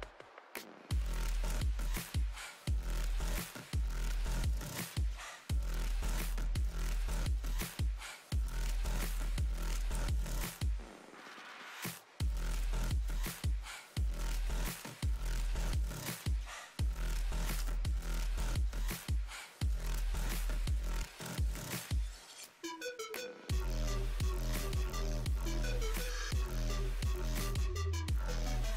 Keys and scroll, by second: 1.6 s, 13.0 s, 23.2 s.